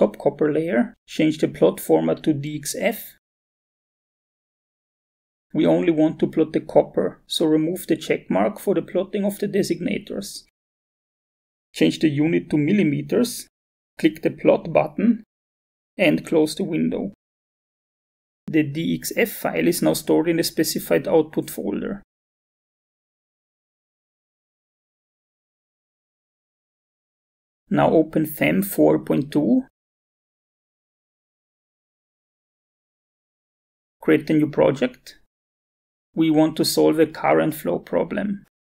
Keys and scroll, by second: 28.8 f, 29.3 m, 32.1 Return.